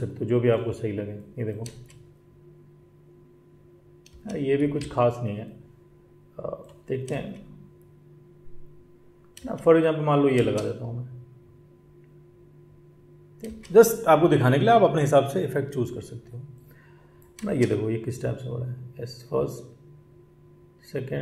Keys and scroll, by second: 1.6 space, 4.1 space, 4.6 ctrl+z, 13.4 space, 17.4 space.